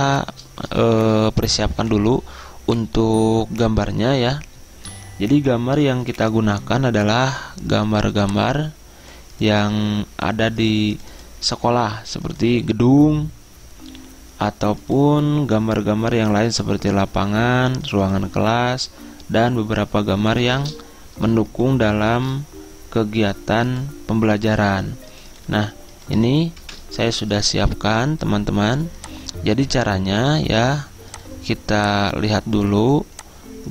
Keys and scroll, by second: 6.7 v, 22.0 ctrl+c.